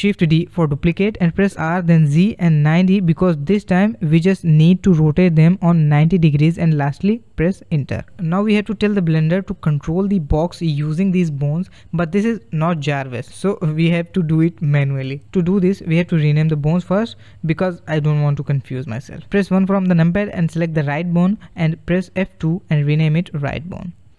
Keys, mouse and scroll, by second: 19.3 KP_1, 20.2-21.9 middle drag, 21.9 click, 23.2 F2.